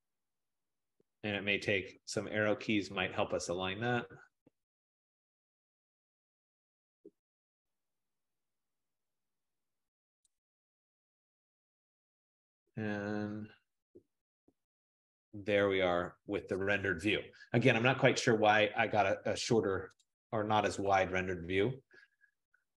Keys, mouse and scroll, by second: 1.7 Left, 1.9 Left, 2.0 Left, 2.2 Left, 2.4 Left, 2.5 Left, 2.7 Left, 2.8 Left, 3.0 Left, 3.2 Left, 3.4 Left, 3.5 Left, 3.7 Left, 3.9 Left, 4.1 Left, 4.3 Left, 4.5 Left, 4.8 Left, 5.0 Left, 5.2 Left, 5.4 Left, 10.3 shift+click, 12.4 Right, 12.9 Right, 13.3 Right, 20.1-22.7 drag.